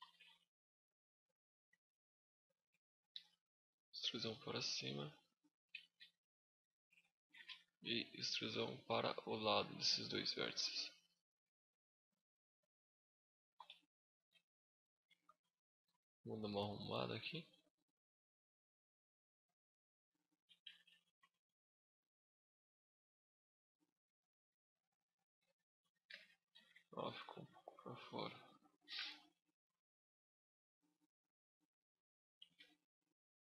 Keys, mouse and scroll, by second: 0.1 middle click, 0.7 middle click, 1.3 z, 1.8 click, 2.3 z, 2.9 e, 3.2 right click, 3.4 click, 4.1 z, 5.5 z, 6.2 alt+right click, 7.1 z, 7.8 e, 8.3 right click, 8.6 click, 11.2 z, 11.6 middle click, 13.3 KP_7, 14.1 shift+scroll up 1, 14.2 shift+middle click, 15.1 KP_5, 16.2 g, 17.6 shift+click, 17.8 middle click, 18.2 z, 18.5 middle click, 19.4 scroll up 3, 19.6 middle click, 20.4 z, 20.8 shift+middle click, 21.1 scroll up 1, 21.2 middle click, 25.2 z, 25.6 middle click, 26.3 z, 26.9 click, 27.9 middle click, 29.1 click, 30.6 right click, 31.2 click, 32.1 z, 32.2 scroll up 1, 32.4 middle click.